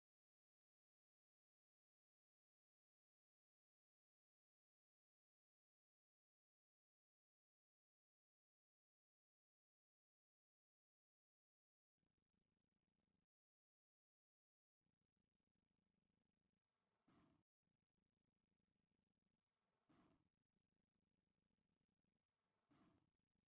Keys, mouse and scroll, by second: 1.9 click, 4.1 click, 7.2 u, 8.7 click, 12.6 click, 18.0 ctrl+click, 20.7 click.